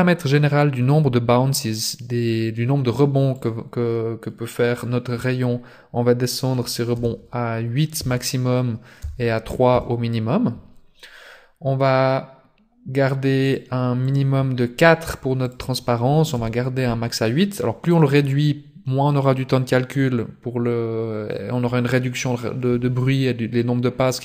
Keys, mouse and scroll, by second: 3.3 click, 14.1 click, 15.4 click.